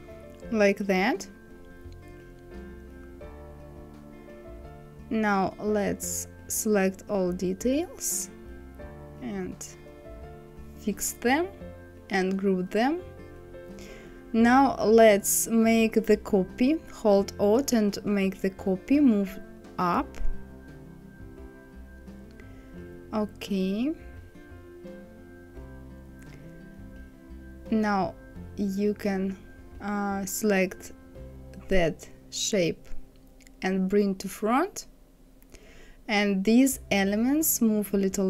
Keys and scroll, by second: 3.0 KP_6, 23.0 Right, 27.1 Left, 37.1 Down.